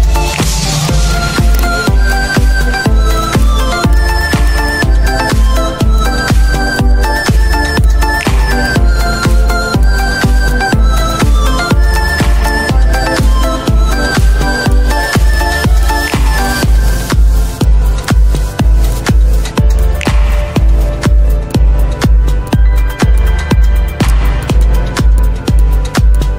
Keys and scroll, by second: 3.6 z, 16.8 z.